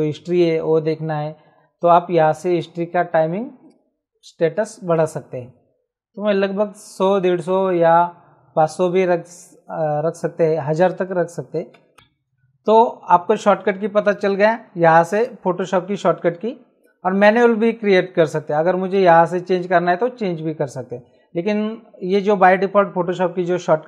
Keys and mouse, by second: 2.6 click, 10.8 click, 11.7 KP_5, 14.0 click, 15.1 click, 17.1 click, 18.9 click, 22.0 click.